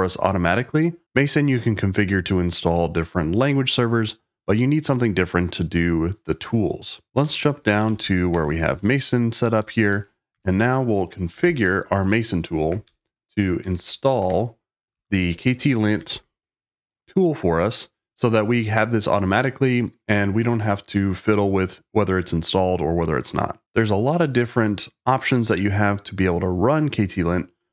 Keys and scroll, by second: 6.9-10.3 typing, 11.3 shift+super+v, 12.8 Page_Down, 13.5 Page_Down, 14.2 Return, 14.8 Escape, 15.2 k, 16.0 shift+v.